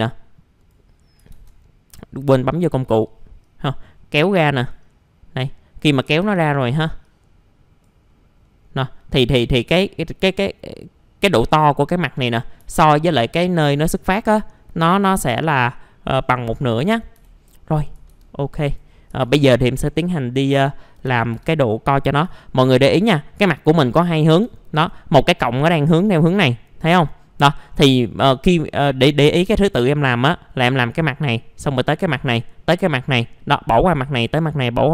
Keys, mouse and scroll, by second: 1.3 ctrl+z, 2.1-4.7 drag, 4.9 middle click, 5.1-6.1 scroll down 1, 6.2 ctrl+z, 7.0 click, 8.1 middle click, 8.6-11.7 scroll up 1, 11.7-12.1 scroll down 1, 12.5 middle click, 12.7-13.1 scroll, 13.4-14.6 scroll up 1, 14.6 middle click, 15.0-17.1 scroll down 1, 17.1 Delete, 18.1 ctrl+z, 19.2 ctrl+z, 19.6-20.1 scroll down 1, 20.2 alt+middle click, 21.1 alt+f, 21.4 alt+z, 21.9 middle click, 22.0 scroll down 1, 22.4 alt+middle click, 23.0-24.1 scroll up 1, 24.3 scroll down 1, 24.6 alt+middle click, 27.7 scroll down 1, 28.0 alt+scroll up 1.